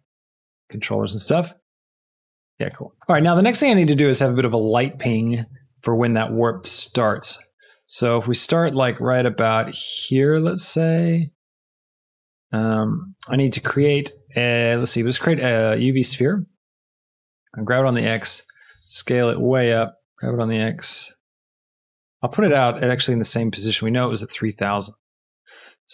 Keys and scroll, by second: 3.0 space, 17.3 g, 17.5 x, 18.6 s, 19.7 g, 19.9 x, 24.5 KP_0, 25.2 Return.